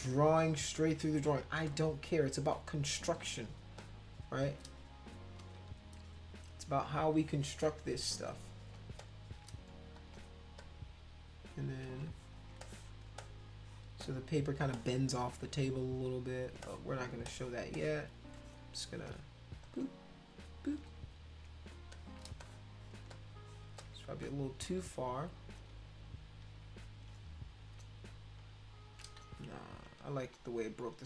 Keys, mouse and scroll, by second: 0.7 click, 1.7 shift+click, 3.8 shift+click, 5.4 ctrl+z, 9.0 shift+click, 10.0 click, 10.6 shift+click, 12.5 space, 12.6 click, 13.2 click, 14.0 click, 14.7 click, 16.6 space, 16.6 click, 17.3 click, 17.7 click, 18.4 click, 19.6 click, 20.3 shift+click, 21.2 click, 21.9 shift+click, 22.3 space, 22.4 click, 23.1 click, 23.8 ctrl+click, 23.9 ctrl+space, 24.7 ctrl+z, 24.9 ctrl+z, 25.6 ctrl+z, 26.4 ctrl+z, 27.6 click, 28.4 shift+click, 29.2 ctrl+z, 30.2 click.